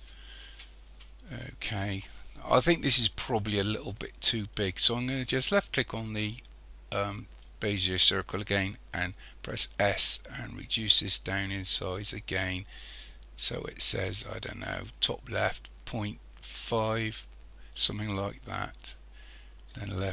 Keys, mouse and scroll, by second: 0.5-1.8 scroll down 2, 1.8-3.7 scroll up 1, 5.6 click, 9.5 s.